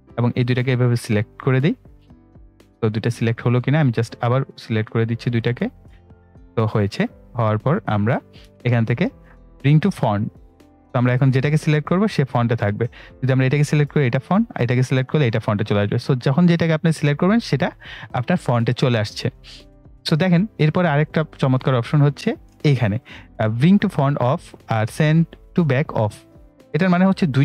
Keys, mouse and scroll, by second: 3.6-7.6 drag, 7.6-10.4 drag, 20.2 right click, 21.6 click.